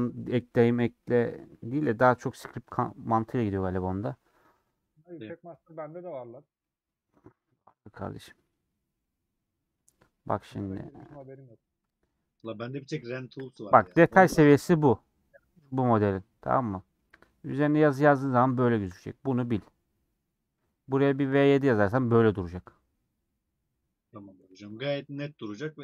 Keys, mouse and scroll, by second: 8.4 middle click, 9.2-11.0 scroll up 1, 11.0-12.1 scroll up 1, 12.1 middle click, 12.5 Tab, 12.6-15.1 middle drag, 15.1-15.9 scroll up 6, 16.2 scroll down 3, 16.6-17.9 middle drag, 17.9-18.5 scroll up 3, 18.5-24.0 shift+middle drag, 24.0-24.4 scroll down 4, 24.4-25.8 middle drag.